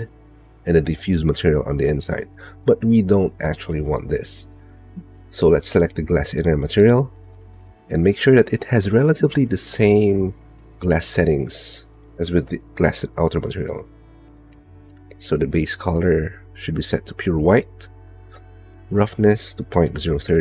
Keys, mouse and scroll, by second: 10.2 middle click, 12.1-13.3 middle drag, 16.6 click, 19.8-20.4 drag.